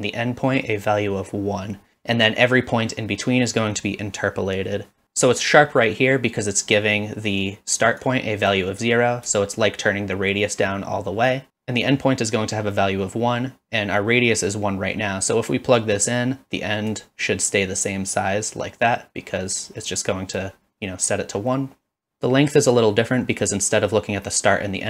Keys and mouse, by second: 8.0-8.5 drag, 9.4-11.5 shift+drag, 15.8-16.9 drag, 18.6 click, 19.9-20.4 drag, 21.5-22.1 middle drag.